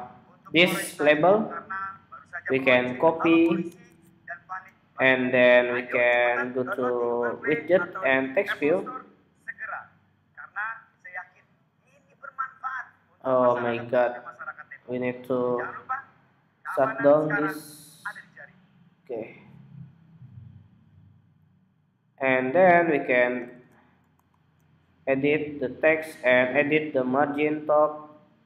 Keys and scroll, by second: 2.3 super+a, 2.7 super+c, 3.7 BackSpace, 23.2 super+v.